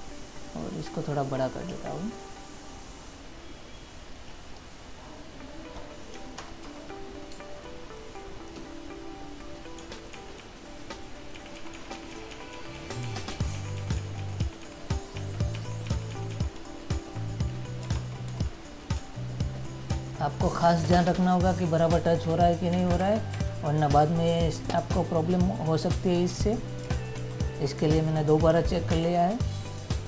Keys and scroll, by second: 6.6 ctrl++, 7.7 space, 19.2 space, 23.0 ctrl+-, 27.4 ctrl+-, 29.2 ctrl+y.